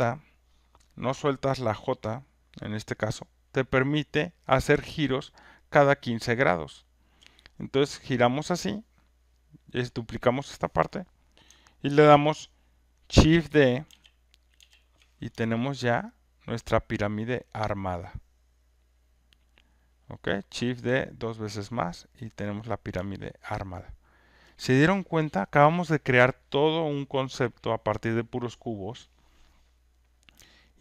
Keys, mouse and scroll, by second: 7.0 click, 7.2 j, 13.9 d, 14.6 d, 19.3 alt+click, 20.4 alt+right click, 20.8 alt+middle click, 22.3 alt+click, 22.7 click, 23.5 alt+right click, 23.9 alt+click, 24.3 alt+right click.